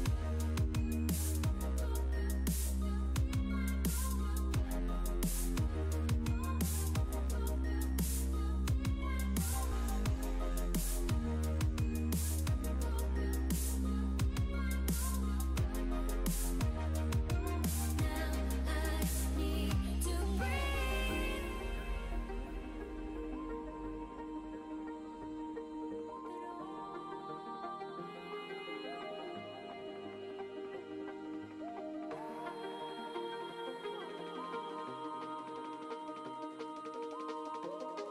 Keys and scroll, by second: 1.3 s, 4.4 s, 23.3 s.